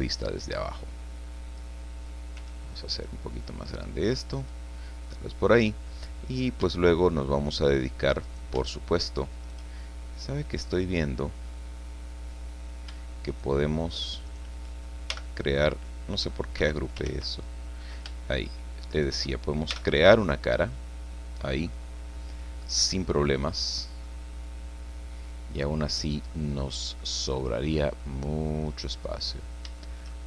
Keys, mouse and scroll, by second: 0.4-1.8 drag, 2.4 s, 4.3 click, 5.0 scroll up 1, 6.3 right click, 8.2 right click, 9.4 shift+right click, 9.8-10.9 shift+middle drag, 11.3-12.9 middle drag, 13.3 shift+right click, 14.3 shift+right click, 15.1 shift+g, 16.6 Escape, 17.1 ctrl+z, 18.9 shift+right click, 19.7 shift+f, 20.3-23.9 drag, 24.0-25.8 drag, 25.9 scroll down 1, 26.3 click, 27.1-27.8 scroll down 3, 27.8 middle click, 28.0 click, 28.9 middle click, 29.2-29.6 scroll up 2, 29.8-30.2 shift+middle drag.